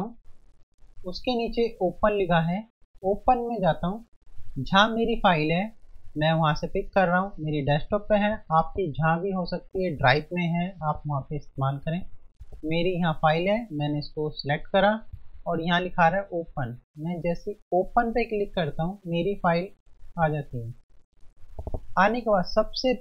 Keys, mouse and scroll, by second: 2.8 click, 3.7 F1, 14.2 click, 15.2 F1, 17.9 click, 18.1 F1.